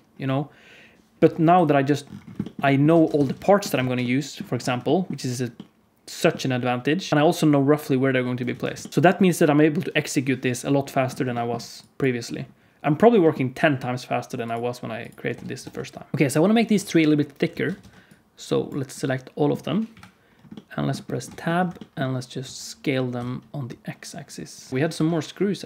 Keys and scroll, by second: 2.8 alt+a, 3.1 ctrl+s, 3.7 alt+shift+z, 7.1 alt+shift+z, 7.1 alt+a, 8.5 ctrl+s, 8.9 alt+shift+z, 13.0 g, 15.2 Tab, 15.5 Tab, 16.1 Tab, 16.1 alt+a, 17.4 alt+a, 17.8 ctrl+s, 19.8 KP_Decimal, 21.2 Tab, 21.6 a, 22.3 s, 24.9 KP_7.